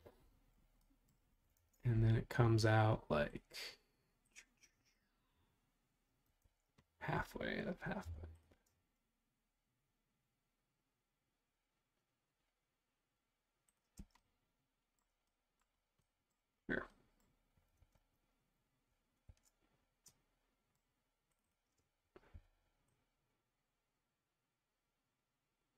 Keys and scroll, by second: 0.9-1.6 typing, 6.4 super+Tab, 8.0 p, 13.9 space, 17.7 super+Tab, 19.3 super+Tab, 22.4 f.